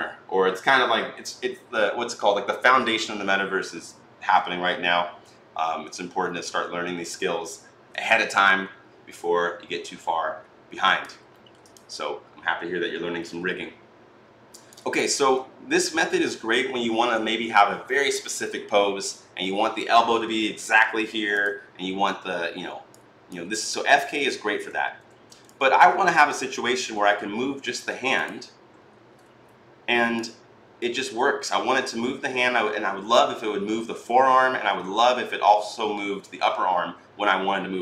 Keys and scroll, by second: 29.0 e.